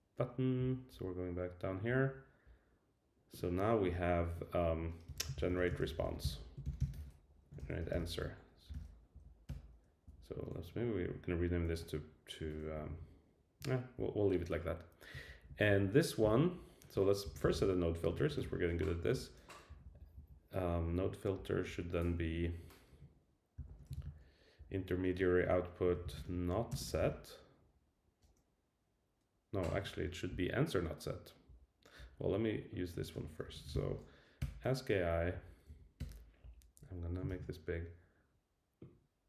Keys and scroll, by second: 3.8 Return, 7.6 alt+shift+Left, 9.1 Down, 9.5 Return, 10.1 Up, 11.4 alt+shift+Right, 12.8 Left, 13.9 Down, 15.3 super+Down, 19.1 Return, 19.8 Down, 23.9 super+v, 24.6 Down, 29.7 Escape, 34.4 Return, 35.2 Down, 35.7 Up, 36.0 Return.